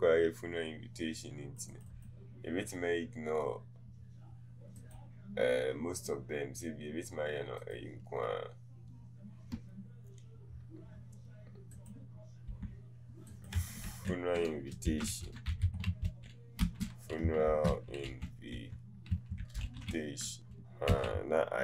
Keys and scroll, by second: 12.6 t, 16.6-20.9 typing.